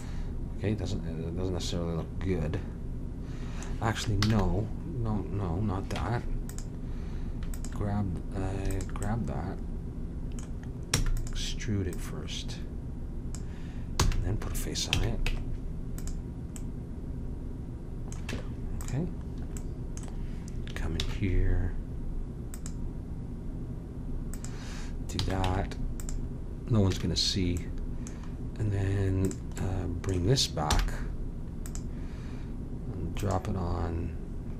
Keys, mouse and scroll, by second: 4.2 ctrl+z, 6.0 Tab, 7.5 click, 9.1-10.4 drag, 10.4 middle click, 10.9 e, 11.9-13.8 drag, 14.0 f, 14.9 a, 15.2 Tab, 18.3 Tab, 21.0 ctrl+r, 25.2 a, 25.4 Tab, 26.9 a, 29.2-31.1 drag, 30.7 m, 33.2-34.5 middle drag.